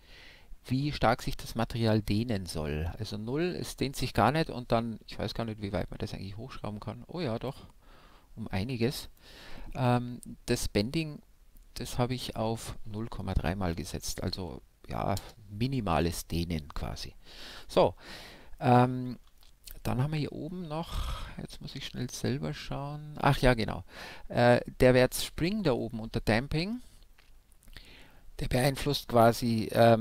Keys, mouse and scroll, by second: 4.9-6.6 drag, 8.2-9.9 drag, 15.8-20.2 middle drag.